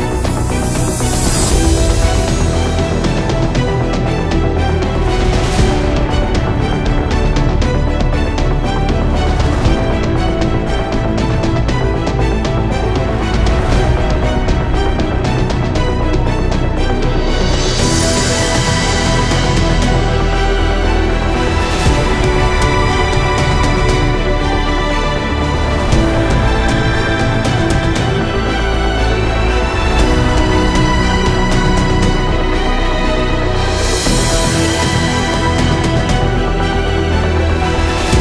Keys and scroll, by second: 19.0 ctrl+alt+j.